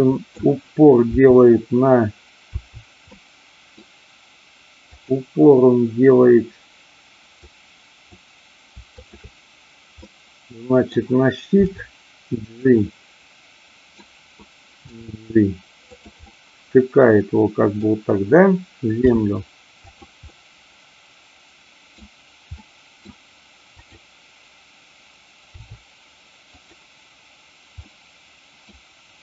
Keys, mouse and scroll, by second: 1.0 r, 3.1-3.9 middle drag, 5.0 click, 7.5-8.1 drag, 9.0 shift+click, 10.1-10.9 middle drag, 11.6 g, 12.5 click, 12.7-14.0 middle drag, 14.9 g, 16.0 click, 16.3 scroll up 1, 16.3-17.9 middle drag, 19.1 r, 20.3-22.0 middle drag, 22.6-23.0 middle drag, 23.9 click, 25.6 r, 26.5 click, 27.7-28.6 middle drag.